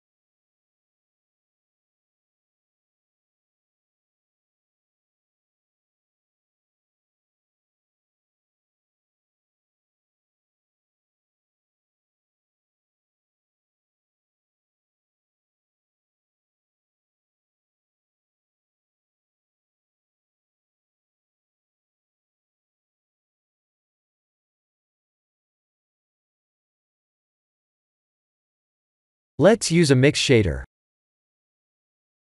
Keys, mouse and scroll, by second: 1.3-1.9 scroll down 2, 1.9-2.5 scroll down 2, 2.5 click, 2.5 scroll down 1, 2.7 x, 3.1 click, 3.3 shift+a, 13.7 click, 15.1 click, 17.4 click, 20.3-20.6 scroll up 4, 20.6 middle click, 21.3-22.1 scroll down 4, 22.1 shift+middle click, 22.7 middle click, 24.1-24.4 scroll up 2.